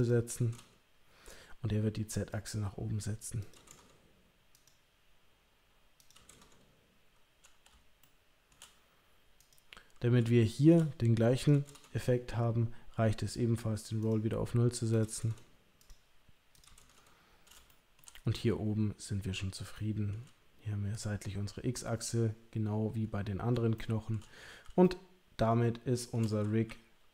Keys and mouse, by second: 0.1 click, 2.4 click, 3.5 click, 5.9 click, 8.1 shift+middle click, 9.4 click, 10.4 shift+middle click, 11.5 click, 14.0 click, 14.9 click, 16.6 click, 17.7 shift+middle click, 19.7 shift+middle click, 23.7 shift+middle click, 24.8-26.2 shift+middle drag, 26.6 KP_3.